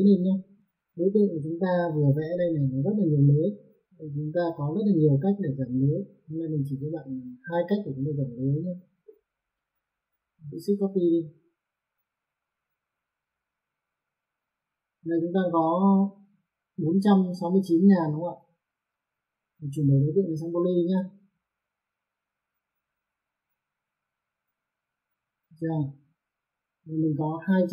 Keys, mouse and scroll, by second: 0.6 click, 1.8 F4, 2.3 middle click, 4.2 middle click, 5.7 click, 10.8 shift+click, 13.2 click, 18.0 click, 19.8 click, 21.5 click, 24.2 click, 26.4 click.